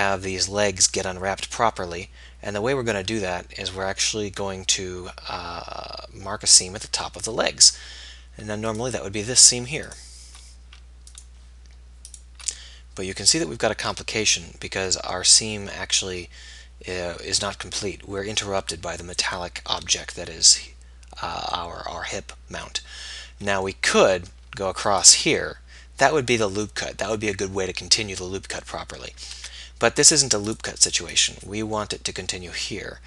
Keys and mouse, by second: 8.1-12.8 middle drag, 13.3-15.1 middle drag, 21.9-27.4 middle drag, 29.8 ctrl+z, 30.6-32.2 drag, 32.2 middle click.